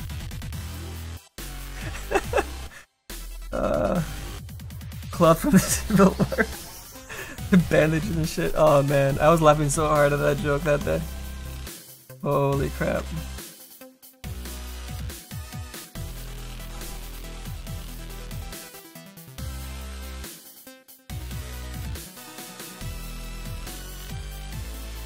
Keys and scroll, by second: 13.0 s.